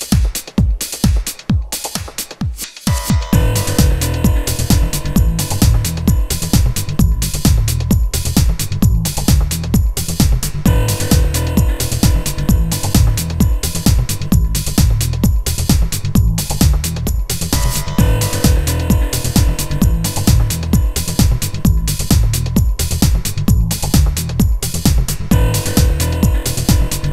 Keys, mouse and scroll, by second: 3.2-4.1 drag, 4.1 shift+a, 7.6-10.9 drag, 12.0-15.1 drag, 15.5 Tab, 15.9-17.8 typing, 18.4 Tab, 19.7-20.6 right drag, 24.1-26.7 right drag, 24.7 g.